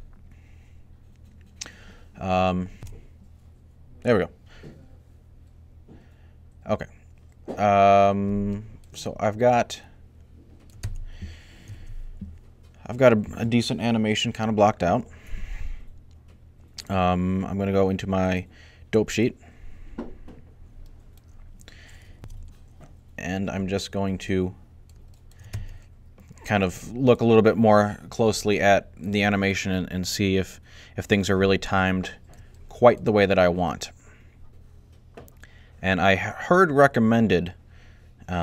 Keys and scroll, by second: 4.4-5.2 typing, 11.5 alt+a, 22.1 alt+a, 28.1 alt+a.